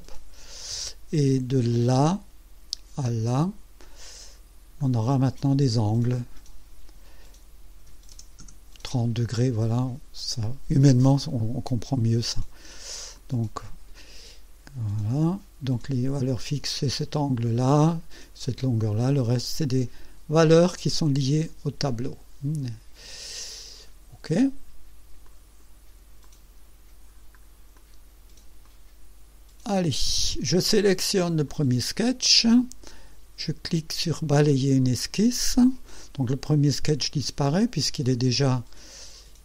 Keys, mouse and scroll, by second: 0.6 scroll down 2, 1.9 click, 3.0 click, 4.8 click, 7.8 KP_3, 8.1 KP_0, 8.4 KP_Enter, 13.1-14.1 drag, 16.3-17.2 drag, 20.7-22.8 drag, 25.2-25.8 drag, 26.2 click, 27.2 scroll down 1, 27.7 click, 28.6 right click, 31.5 click, 34.5 click.